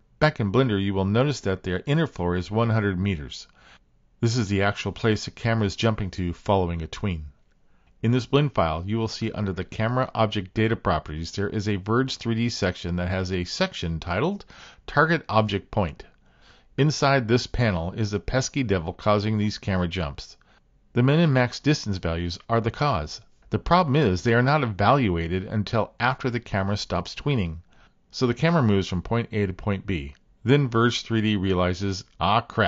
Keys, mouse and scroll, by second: 10.3 click, 12.9 click, 15.8 click.